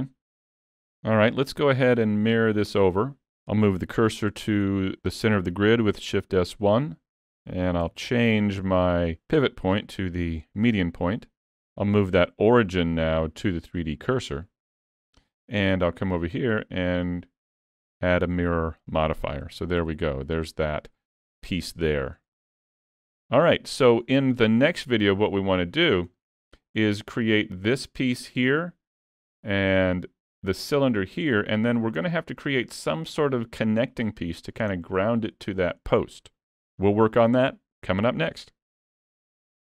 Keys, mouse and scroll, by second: 3.8 shift+s, 12.1 click, 15.8 click, 18.2 middle click, 19.5 alt+a, 20.0 middle click, 22.5 shift+middle click, 23.5 scroll up 1, 23.8 middle click, 24.4 shift+middle click, 24.9 scroll up 1, 25.7-26.1 scroll down 3, 26.2 shift+middle click, 28.6-29.0 scroll up 2, 29.2 shift+middle click, 34.8 scroll down 2.